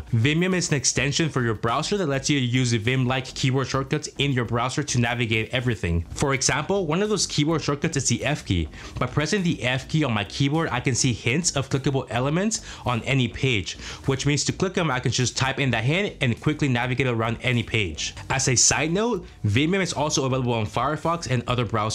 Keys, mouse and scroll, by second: 0.0-7.7 typing, 2.3 Return, 9.4 f, 11.2-15.5 typing, 19.5-20.3 typing.